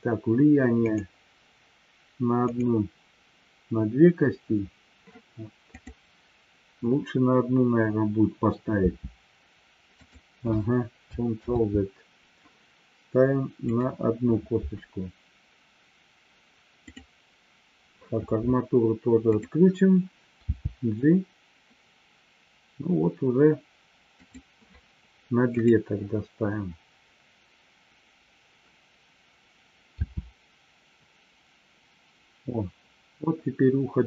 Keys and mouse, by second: 0.9 click, 2.5 click, 11.7 ctrl+z, 13.6 click, 16.7 click, 19.4 click, 24.5 click, 25.6 click.